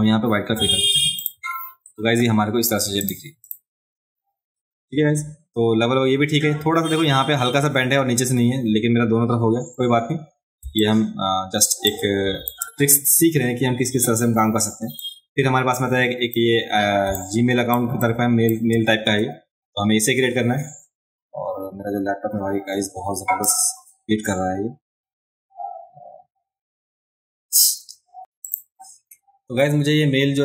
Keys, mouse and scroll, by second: 1.2 click, 3.0 click, 3.5 click, 10.6 space, 10.8 click, 11.8 click, 15.0-16.3 drag, 17.0 space, 17.1 click, 18.0 click, 28.4 click.